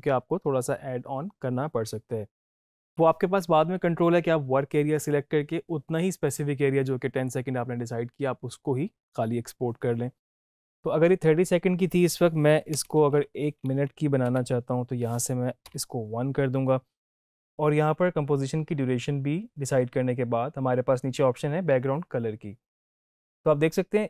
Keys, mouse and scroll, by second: 13.4 Left, 14.2 shift+Left.